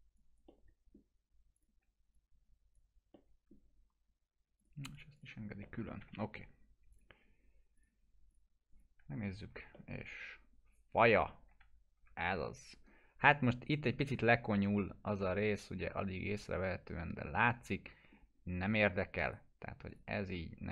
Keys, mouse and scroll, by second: 0.5-1.1 middle click, 1.6 click, 3.1-3.8 alt+middle drag, 4.6 click, 5.3 scroll down 1, 5.6 alt+middle click, 6.0 F3, 6.9 click, 9.2 F4, 9.7-11.3 alt+middle drag, 11.5 F4, 13.2-13.7 scroll up 1, 14.6-15.2 alt+middle drag, 16.9 scroll down 1, 17.4-18.3 alt+middle drag, 19.3 right click, 19.9 click, 20.2 scroll down 1.